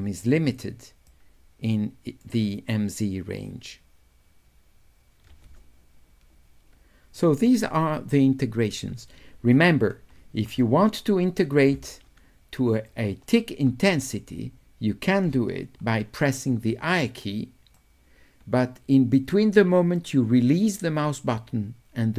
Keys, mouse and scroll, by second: 0.1 click, 1.1-2.3 middle drag, 12.8 click, 17.8 right click, 18.1-19.5 drag, 19.5-22.1 right drag.